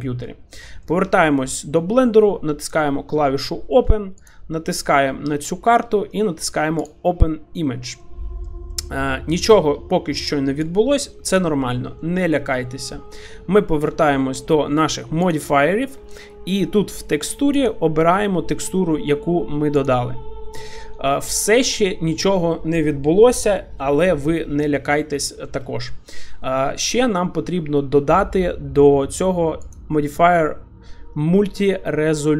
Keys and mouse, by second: 0.8 shift+middle click, 2.7 click, 8.0 middle click, 8.7 shift+middle drag, 10.6 click, 12.0 shift+middle drag, 12.4 middle click, 15.2 click, 17.5-20.2 drag, 20.8-21.2 middle drag, 25.3 shift+middle drag, 25.6 middle click, 29.8-32.3 drag.